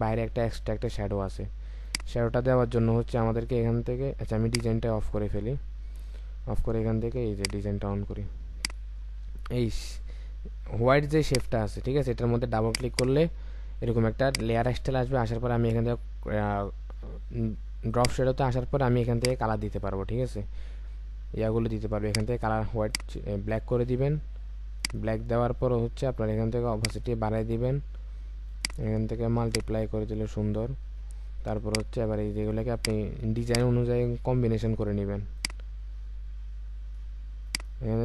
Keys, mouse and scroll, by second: 11.2 ctrl+click, 12.8 double click.